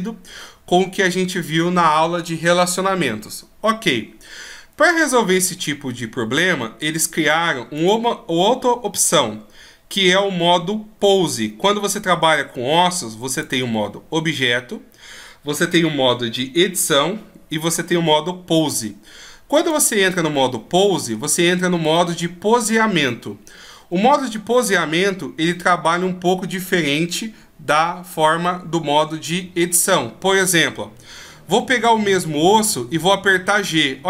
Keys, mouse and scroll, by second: 7.7 click, 13.2 click, 20.1 middle click, 21.7 right click, 23.0 middle click, 32.5 g.